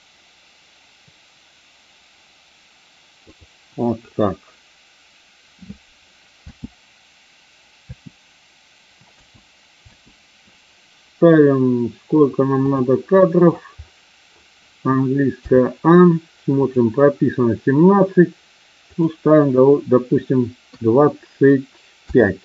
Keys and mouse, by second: 6.5 space, 7.8 space, 9.1 space, 9.8 space, 12.6 click, 15.5 a, 16.6 click, 19.0-22.4 drag.